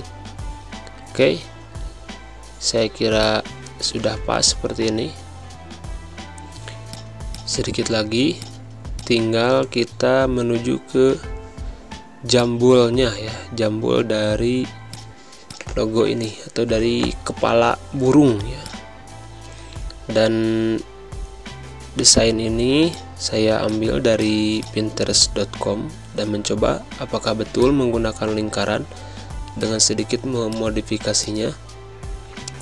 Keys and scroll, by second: 1.1 Left, 4.1 Up, 5.8 Right, 6.7 space, 16.3 Up, 19.9 Up, 28.4 Down, 29.8 z, 30.6 space, 32.4 space.